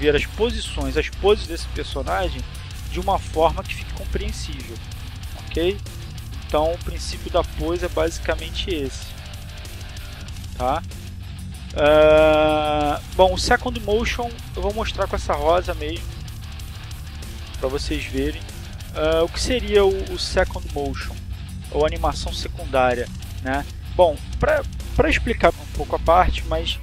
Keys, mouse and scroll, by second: 1.5 click, 2.1-3.8 drag, 4.3-6.0 drag, 9.5-12.1 drag, 25.9 click.